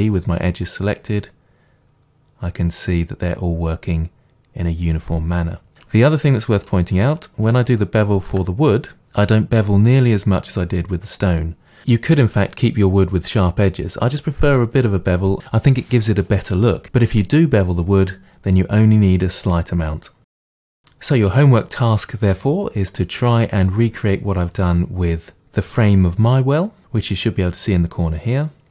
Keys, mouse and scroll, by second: 5.9 click, 6.3-28.7 middle drag, 7.0-7.6 scroll up 2, 20.3 scroll down 2.